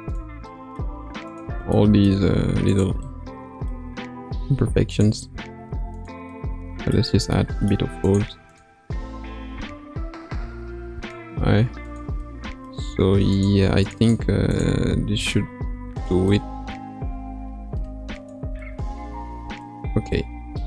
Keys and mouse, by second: 1.3 click, 1.7 middle click, 2.3 g, 5.0 click, 5.4 g, 6.3-7.3 middle drag, 8.0 click, 9.5 g, 11.3 g, 12.2-13.3 middle drag, 13.3 click, 14.0 click, 14.9 g, 17.0 g.